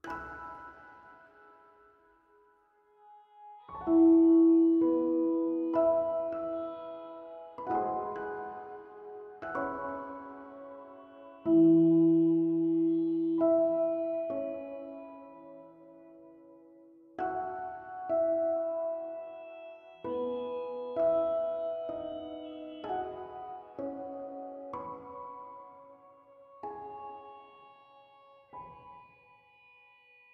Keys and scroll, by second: 0.7 h, 2.0 h, 6.4-7.5 typing.